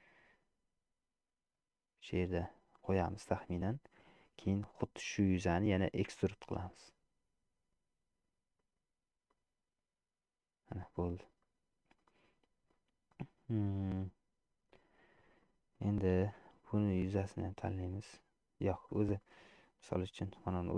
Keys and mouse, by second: 6.3 e, 9.3-10.9 middle drag, 11.6 middle click, 14.2 middle click, 15.5 middle click, 16.8 shift+click, 17.4 middle click, 18.9 click, 19.4 middle click, 20.4 click.